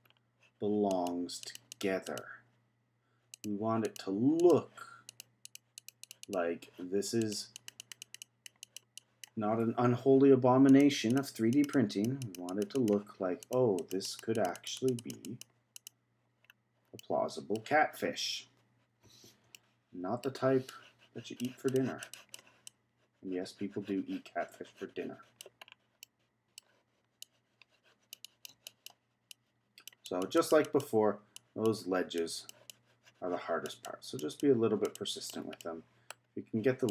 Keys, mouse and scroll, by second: 0.1-0.7 scroll down 2, 0.7 scroll down 1, 0.9 click, 2.0 click, 3.3 click, 3.8 click, 4.3-5.6 drag, 5.8 click, 7.2 click, 7.5-9.7 drag, 9.7-10.7 scroll up 1, 10.7 click, 11.1-12.9 drag, 13.4-16.4 drag, 16.4-17.0 scroll down 2, 17.0-18.2 middle drag, 18.2-19.5 scroll up 3, 19.5-20.7 shift+middle drag, 20.7-25.6 drag, 25.6-26.0 scroll down 2, 26.0-27.2 middle drag, 27.2-35.6 drag, 35.6 middle click, 36.2-36.9 scroll up 2.